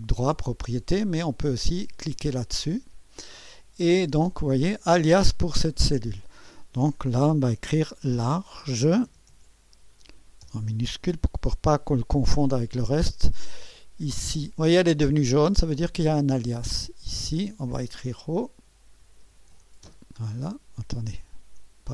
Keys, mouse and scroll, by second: 0.0-1.1 right drag, 1.8-3.5 drag, 7.9-9.8 typing, 10.4 Return, 14.4-15.4 drag, 17.1 click, 18.4-20.0 typing, 21.0-21.9 drag.